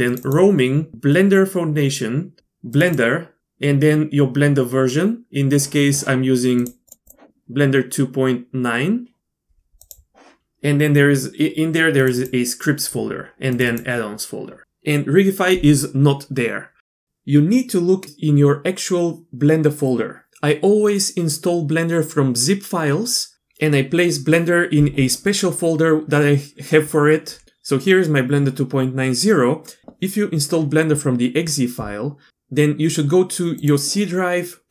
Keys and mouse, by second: 6.9-10.0 drag.